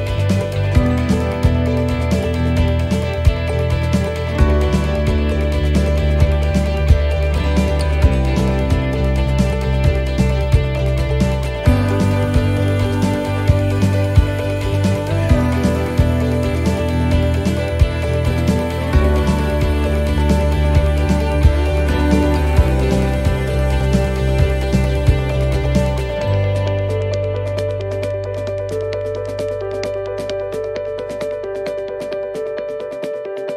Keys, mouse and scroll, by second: 3.5 middle click, 6.4 click, 7.2 middle click, 7.9-8.8 scroll up 2, 8.8 middle click, 9.3 x, 10.9 c, 13.5 x, 15.0 middle click, 17.4-17.7 scroll down 4, 17.7 middle click, 18.2-18.6 scroll down 1, 20.0 click, 22.7 middle click, 23.4 shift+middle click, 24.0 middle click, 27.2 click, 29.8 click, 30.6 shift+middle click, 31.3 right click, 32.1 scroll up 4, 32.7 middle click.